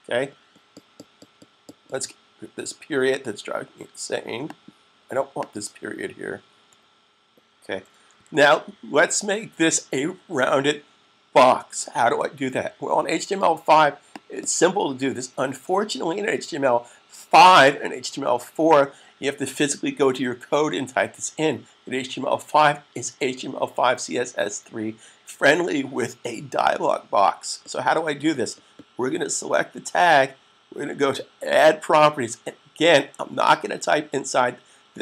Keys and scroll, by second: 8.0 super+s.